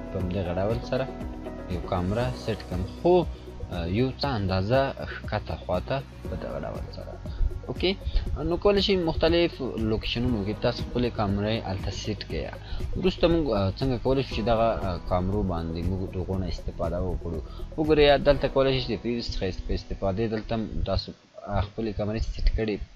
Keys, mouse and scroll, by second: 1.1-2.3 drag, 2.6 scroll down 1, 4.4 click, 5.8 scroll up 1, 9.5 click, 18.3 click.